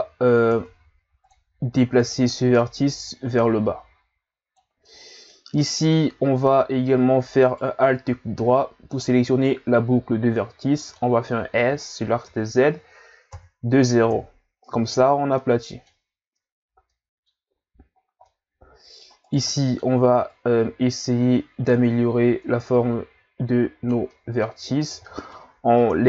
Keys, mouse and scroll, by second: 0.5 ctrl+Tab, 2.0 right click, 2.4 middle click, 3.0 click, 4.9-7.4 middle drag, 7.4 alt+right click, 8.2 scroll down 1, 8.4-11.5 middle drag, 15.4-16.5 middle drag, 16.5-16.9 scroll down 2, 16.9 middle click, 17.5-18.0 scroll up 1, 18.0 scroll down 2, 18.2-19.2 middle drag, 19.2 right click, 19.6 middle click, 20.2 click, 24.1 middle click, 24.9 right click, 25.1 middle click, 25.8 click.